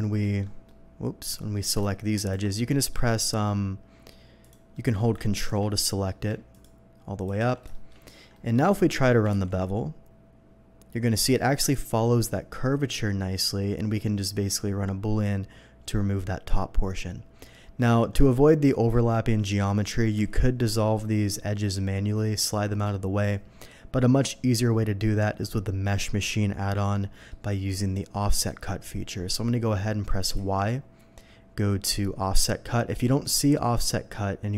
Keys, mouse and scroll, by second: 0.2 alt+middle click, 0.6 alt+middle click, 1.4 alt+middle click, 2.2 alt+shift+click, 2.7 alt+shift+middle click, 3.1 shift+middle click, 4.4 shift+click, 4.7 shift+middle click, 5.4 ctrl+click, 5.8 ctrl+middle click, 6.5 ctrl+click, 7.2 ctrl+click, 7.7 shift+middle click, 8.3 shift+middle click, 8.7 shift+middle click, 9.3 ctrl+b, 11.2 click, 16.3 scroll down 1, 17.7 middle click, 20.1 ctrl+z, 26.4 middle click, 26.9 middle click, 28.8 middle click, 30.4 y.